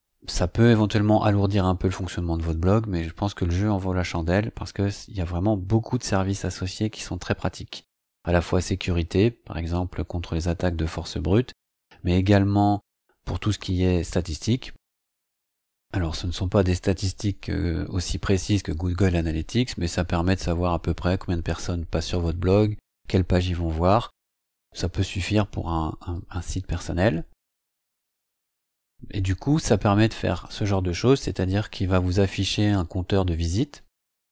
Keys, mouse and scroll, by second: 26.1 click, 30.3 click, 31.8-34.0 scroll down 9.